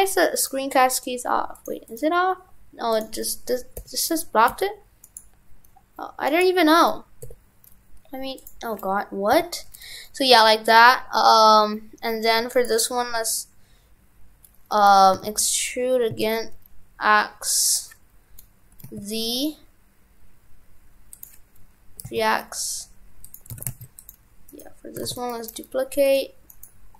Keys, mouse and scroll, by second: 12.5 right click, 15.2 e, 23.5 shift+f, 24.5 right click, 25.1 shift+d, 25.3 right click.